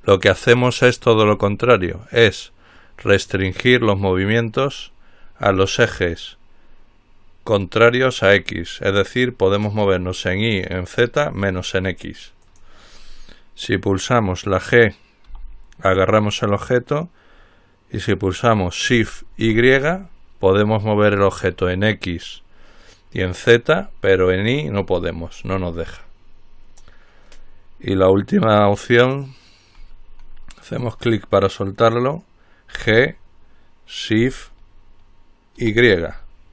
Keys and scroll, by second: 0.0 x, 16.0 g, 19.7 y, 33.0 g, 35.8 y.